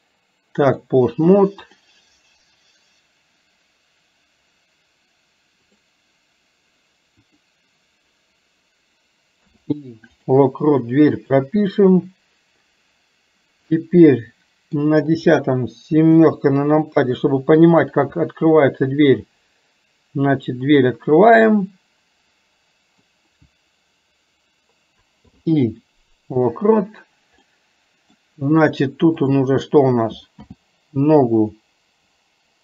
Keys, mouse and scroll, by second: 5.8 click, 7.4 click, 11.3 click, 13.8-14.9 middle drag, 21.4-23.0 middle drag, 27.5 middle click, 29.3 click.